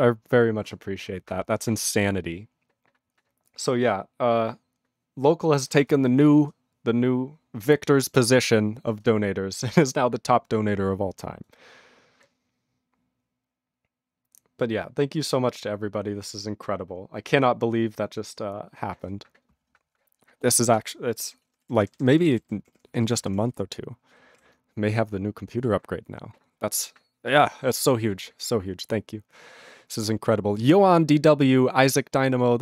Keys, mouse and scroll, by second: 15.1 /, 21.7 ctrl+d, 21.8 ctrl+n, 21.9 ctrl+n, 22.2 ctrl+n, 22.6 ctrl+p, 22.7 ctrl+p, 23.0 ctrl+b, 23.1 ctrl+p, 23.2 ctrl+b, 23.3 ctrl+p, 23.5 ctrl+f, 23.5 ctrl+n, 24.3 ctrl+p.